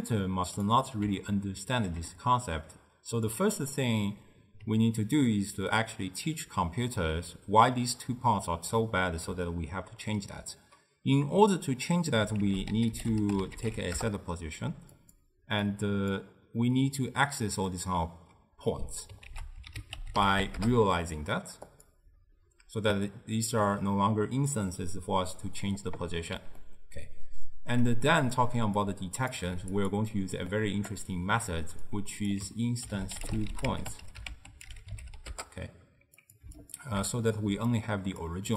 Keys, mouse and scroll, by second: 0.0 click, 1.4-3.4 ctrl+middle drag, 3.4 click, 12.5 ctrl+a, 15.7 click, 19.3 ctrl+a, 26.7-28.9 ctrl+middle drag, 28.9 click, 29.5 g, 30.6 click, 32.0 drag, 36.7 alt+shift+click, 37.6 d, 37.8-38.3 drag, 38.3-38.5 d.